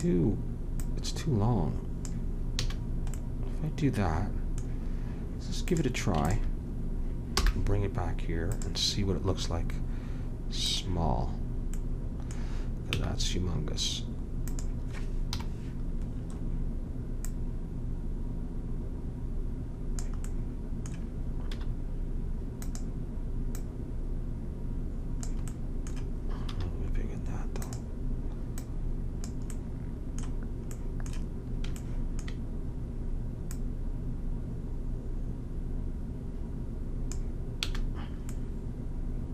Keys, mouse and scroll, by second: 0.7-2.6 drag, 2.6 a, 5.7-8.1 drag, 7.3 m, 10.6-12.4 drag, 12.9 s, 15.3 KP_Decimal, 17.3-19.1 drag, 20.3 middle click, 21.5 s, 23.5 click, 25.5-26.6 middle drag, 26.5 s, 28.6-29.8 drag, 29.8 middle click, 33.5-35.3 drag, 37.7 a, 38.3-39.3 middle drag.